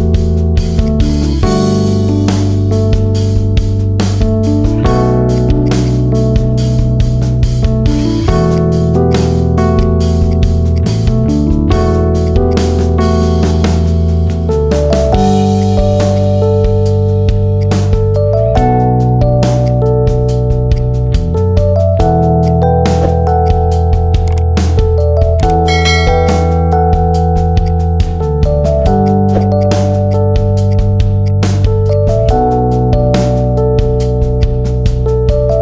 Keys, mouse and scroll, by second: 0.1-0.7 middle drag, 0.7 click, 0.9 middle click, 1.5 Tab, 1.8 middle drag, 2.0-2.9 scroll up 5, 2.3 shift+middle click, 2.9 middle click, 3.1 scroll down 4, 3.4-4.0 middle drag, 4.0-4.3 scroll up 2, 4.3-5.2 middle drag, 5.2 shift+click, 5.5 shift+click, 5.7 shift+click, 6.0-6.7 scroll down 7, 6.7 p, 7.3 Tab, 7.7-8.1 middle drag, 8.4 click, 8.7-9.0 middle drag, 9.0 click, 9.7 click, 10.1 click, 10.7 click, 11.9 middle click, 12.1 click, 12.3 click, 13.1 KP_3, 13.8 g, 15.7 middle click, 15.9 scroll down 4, 16.1 drag, 16.2 middle click, 16.5 shift+a, 17.9 s, 19.8 middle click, 20.1 scroll down 2, 20.3-20.7 middle drag, 20.7 drag, 20.8-21.1 scroll up 2, 21.1 shift+a, 22.8 s, 23.5-24.1 middle drag, 24.1 KP_3, 24.8 r, 26.5 g, 27.7 middle click, 28.1-28.7 scroll up 5, 28.7 shift+middle drag, 28.9 click, 29.3 right click, 29.9 click, 30.1-30.6 scroll down 2, 30.6 drag, 31.1 click, 31.7 click, 32.0 scroll down 6, 32.3-32.8 scroll up 4, 33.1 click, 33.5 scroll down 1, 34.3-35.6 drag.